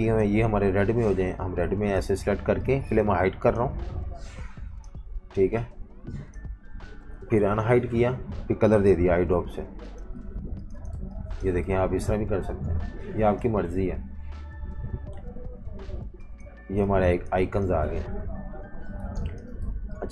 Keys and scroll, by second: 0.3 super+3, 2.1 super+3, 3.7 super+3, 4.9 super+3, 6.5 super+3, 7.1 alt+super+3, 7.4 super+-, 7.5 super+-, 8.9 i, 10.2-12.5 typing, 18.0 super+-, 18.2 super+-, 18.8-20.1 typing.